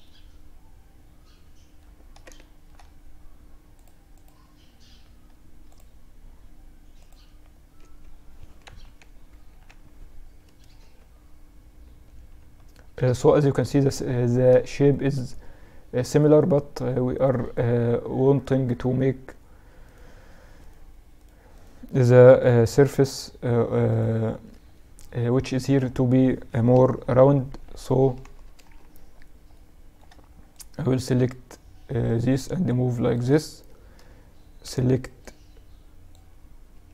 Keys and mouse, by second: 1.4 middle click, 2.7-4.8 middle drag, 4.8 click, 6.9 Tab, 8.0 KP_Add, 8.3 KP_Add, 9.8 Tab, 11.2 Tab, 12.4 middle click, 13.9-24.7 right drag, 24.7-25.7 middle drag, 25.7 KP_3, 26.5 z, 27.3 KP_Add, 27.4 KP_Add, 28.5 middle click, 28.7 middle click, 29.5-30.9 middle drag, 30.9-32.0 drag, 31.2 middle click, 32.8 a, 33.7 b, 35.7 b.